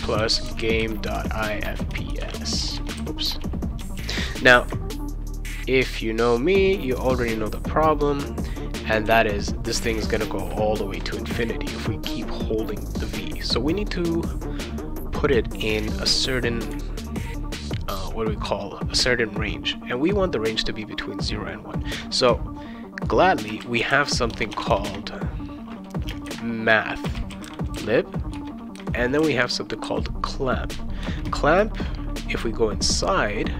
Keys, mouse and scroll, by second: 0.0-3.4 typing, 3.9 ctrl+s, 23.2-24.9 typing, 26.1-29.8 typing, 28.3 Return, 31.0 Return, 31.6 shift+9.